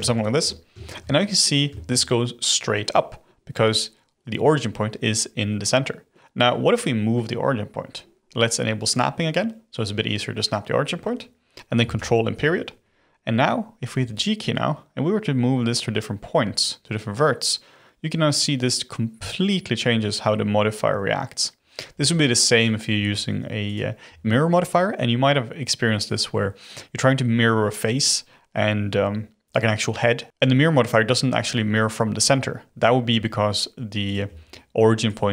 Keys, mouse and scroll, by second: 0.2 shift+middle drag, 0.4-0.7 scroll up 4, 0.7-8.5 shift+middle drag, 8.9 click, 11.9 ctrl+., 13.9 g, 21.9 g, 22.9 g, 24.0 g, 33.1 g, 34.2 g.